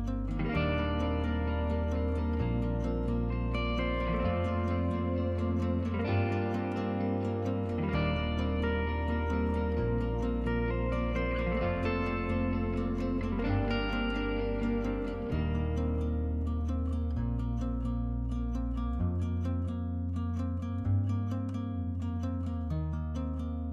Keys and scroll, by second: 1.4-11.2 Escape, 3.5-4.3 typing, 11.4 Escape, 21.6 Escape.